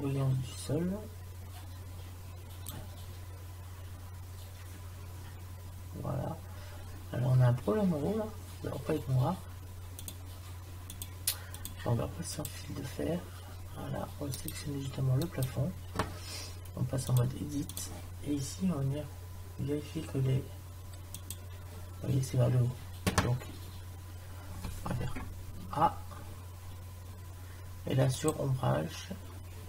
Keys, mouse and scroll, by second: 25.7 a, 28.1-29.6 drag.